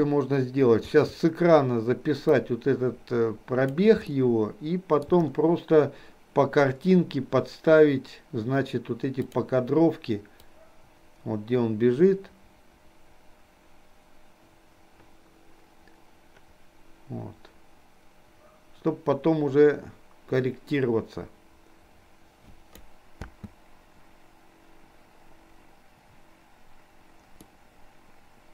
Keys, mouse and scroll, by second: 2.6-4.1 drag, 4.2-5.2 shift+middle drag, 9.4 click, 10.6-23.0 drag, 23.2 space, 27.6-28.5 middle drag.